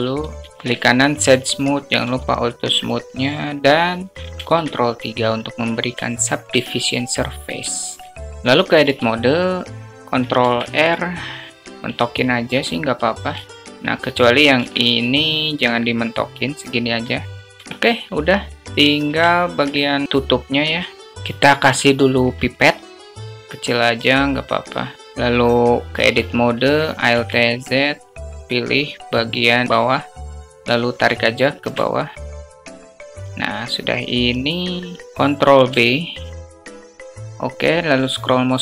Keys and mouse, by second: 1.8 q, 2.0 q, 4.3 ctrl+3, 6.1 alt+shift+drag, 8.0 shift+drag, 8.1 alt+shift+middle click, 8.7 Tab, 10.4 ctrl+r, 14.4 ctrl+r, 14.6 ctrl+r, 17.4 Tab, 19.1 alt+shift+drag, 21.7 alt+shift+drag, 22.8 shift+a, 22.9 s, 23.8-24.9 drag, 25.9 Tab, 26.9 alt+z, 28.3-29.4 drag, 29.8 click, 31.1 alt+shift+click, 32.1 click, 32.9 alt+shift+click, 34.9 click, 35.5 ctrl+b.